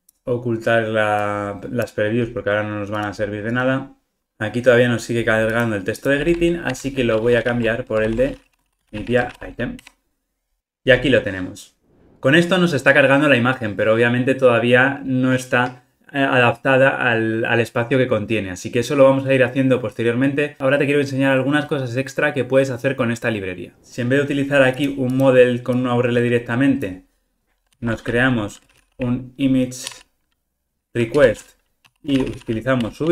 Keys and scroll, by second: 6.6 shift+super+Down, 7.4 super+z, 8.1 super+z, 9.8 Return, 27.7 super+x, 31.2 Return.